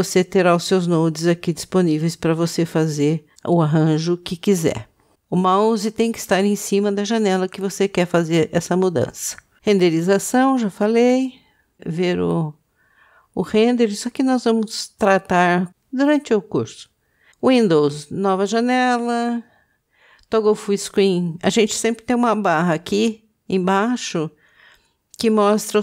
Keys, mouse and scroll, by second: 3.6 ctrl+space, 17.3 click.